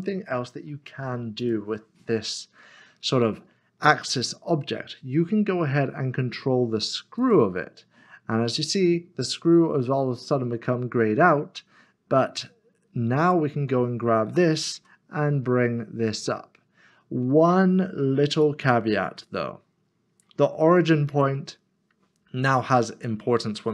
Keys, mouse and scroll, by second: 4.1 click, 7.2 click, 9.4-9.9 scroll up 1, 13.2 click, 14.3 g, 18.3 g, 19.2 click, 19.4 middle click, 21.1 click.